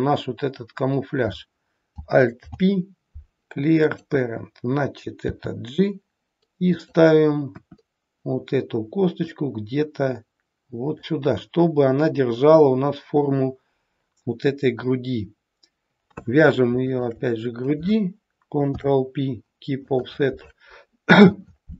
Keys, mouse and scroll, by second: 2.3 alt+p, 5.2 g, 7.4 KP_1, 9.3 click, 16.9 shift+click, 18.7 ctrl+p.